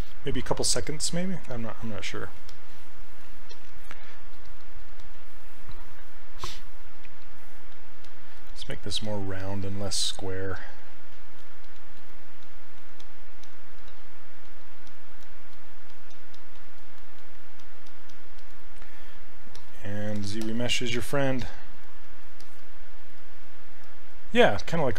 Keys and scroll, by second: 7.0 s.